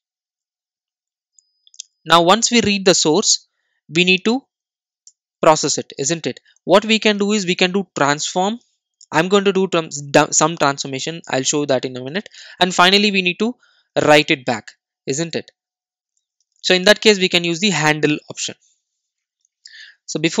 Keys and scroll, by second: 9.1 Return.